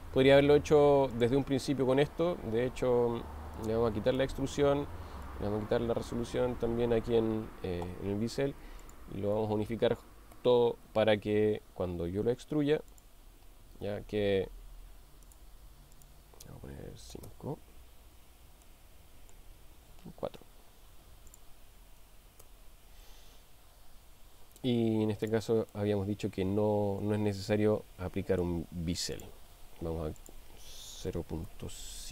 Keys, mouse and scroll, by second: 1.1 click, 3.6 click, 5.3 click, 8.8 shift+click, 10.3 ctrl+j, 15.3 click, 15.9-18.0 drag, 18.6-19.3 middle drag, 21.4-23.1 drag, 25.7-28.6 middle drag, 29.1 click, 30.2-32.1 drag.